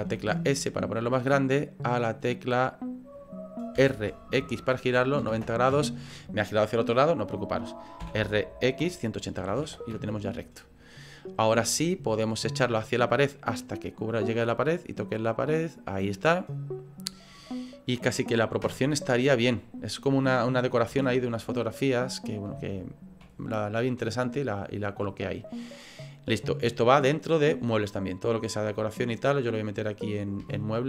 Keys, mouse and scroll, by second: 0.0 s, 2.0 middle click, 2.1 middle click, 3.8 r, 8.0 r, 10.8 middle click, 11.6 shift+middle click, 12.5 click, 16.2 middle click, 18.6 KP_0, 20.9 s, 22.7 shift+middle click, 26.7 click, 30.5 shift+middle click.